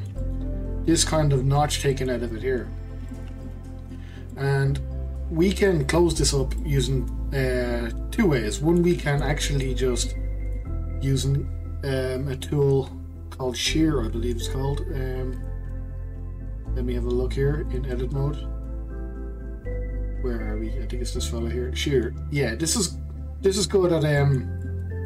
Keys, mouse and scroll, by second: 2.3 click, 2.7-3.1 scroll up 1, 3.1-13.1 shift+middle drag, 15.3-18.4 drag, 24.2-25.0 middle drag.